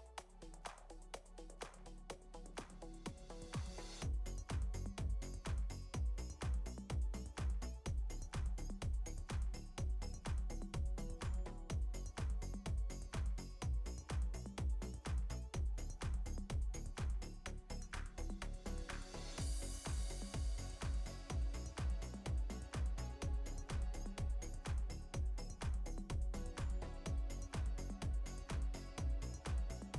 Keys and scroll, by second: 1.6 ctrl+d, 5.9 space, 27.2 space.